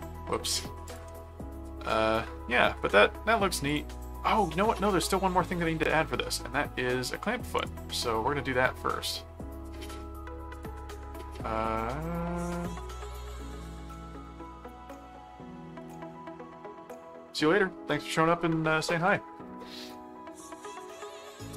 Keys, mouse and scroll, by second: 0.8 ctrl+click, 1.9 middle click, 3.7 click, 4.5 middle click, 5.6 middle click, 7.5 click, 10.5 click, 11.5 click, 12.0 middle click, 12.7 middle click, 13.9-15.5 middle drag, 15.8 click, 20.3 click.